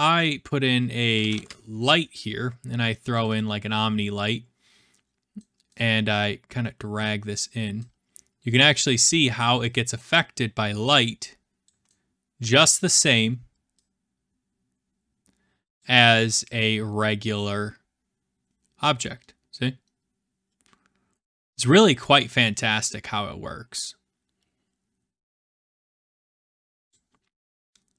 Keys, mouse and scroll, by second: 0.8-1.9 typing, 3.2 click, 3.3 click, 5.0-5.4 scroll, 5.8-6.5 scroll, 7.3 click, 9.0 click, 11.6 click, 13.0 middle click, 15.8 click, 26.9 click.